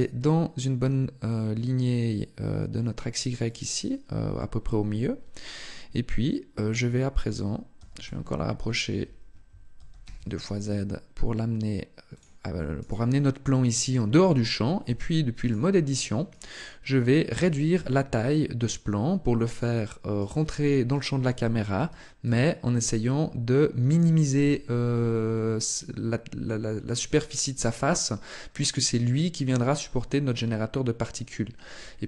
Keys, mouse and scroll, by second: 3.3 click, 7.6 g, 9.7 g, 12.0 click, 12.6 right click, 14.7 Tab, 15.3 right click, 16.1 shift+right click, 17.2 s, 19.4 click, 20.0 right click, 20.7 shift+right click, 21.5 s, 23.8 click, 24.3 Tab, 24.7 middle click.